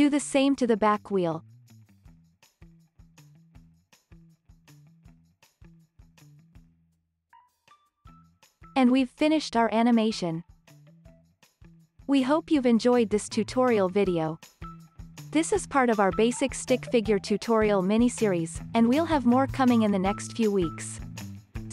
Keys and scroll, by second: 4.4-6.6 typing.